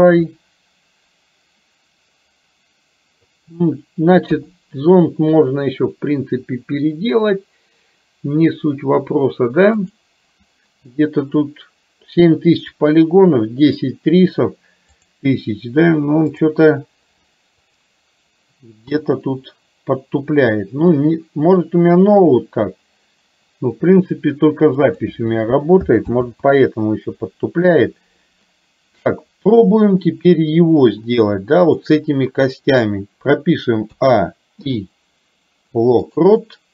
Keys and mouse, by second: 0.3-3.3 middle drag, 4.4 KP_3, 9.9 click, 15.0-16.5 drag, 17.7 click, 26.4 ctrl+z, 29.2-29.7 middle drag, 30.9-31.9 drag, 34.0 a, 34.7 i.